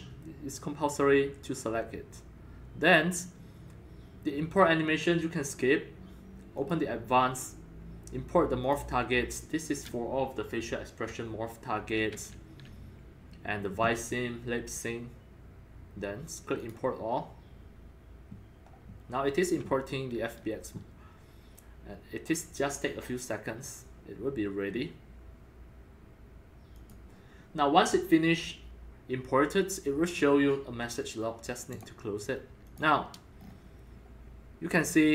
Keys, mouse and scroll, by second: 6.6-7.5 drag, 8.6 click, 12.1-13.6 drag, 13.7 click, 16.6 click, 16.8 click, 17.1-18.4 drag, 18.8-21.8 drag, 26.7-31.9 drag, 32.7 click, 33.3 click, 33.4-35.1 scroll up 5.